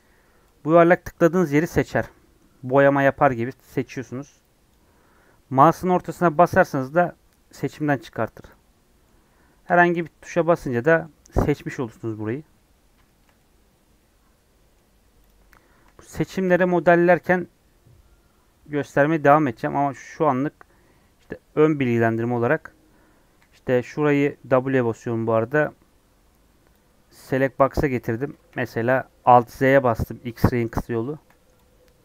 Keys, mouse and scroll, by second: 9.9-14.9 middle drag, 14.9 scroll down 3, 15.2 click, 15.4 scroll up 2, 19.0 Tab, 19.4 Tab, 21.9-28.3 middle drag, 28.3 KP_1, 29.2 alt+z, 31.0-32.0 shift+middle drag.